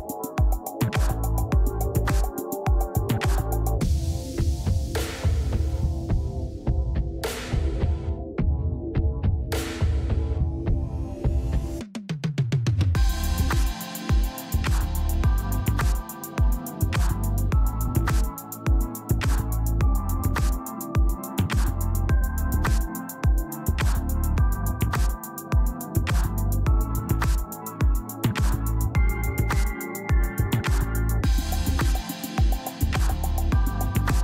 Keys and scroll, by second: 1.0 alt+space.